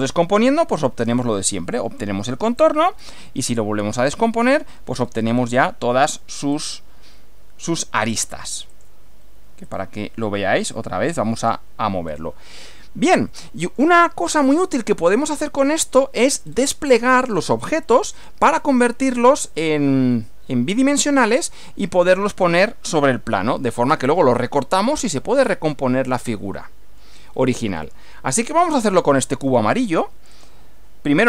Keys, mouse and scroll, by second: 2.6 click, 3.9 click, 4.9 scroll up 1, 6.5 click, 8.1 click, 8.7 click, 9.7 click, 10.6 click, 11.4 click, 12.1-12.4 scroll down 2, 12.9 shift+click, 13.3-14.0 shift+middle drag, 14.1-15.3 shift+middle drag, 15.4-16.1 middle drag, 16.5 scroll up 1, 16.7 scroll down 1, 16.8 scroll up 2, 16.9 scroll down 1, 17.3-17.6 scroll up 2, 17.6 scroll down 1, 18.1 scroll up 2, 18.6-19.6 shift+middle drag, 19.6 shift+scroll up 2, 26.3-27.2 middle drag, 27.3 scroll down 2, 27.8-28.6 middle drag, 30.3 click.